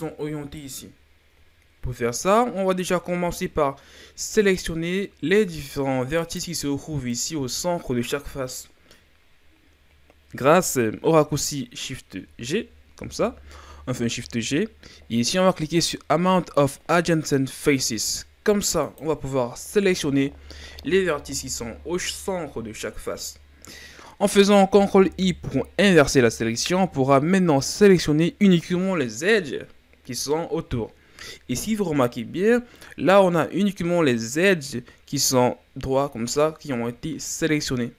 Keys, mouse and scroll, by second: 3.6-4.5 scroll up 1, 4.5 right click, 6.3 right click, 7.1 right click, 12.9 shift+g, 21.1-24.2 middle drag, 24.9 ctrl+i, 32.8-35.8 middle drag.